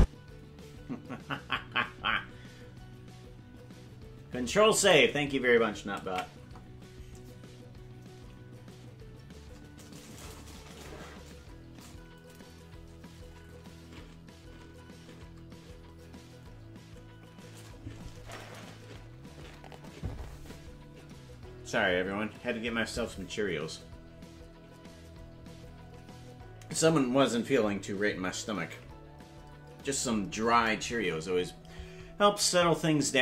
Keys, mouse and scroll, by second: 0.0 space, 8.2 ctrl+s.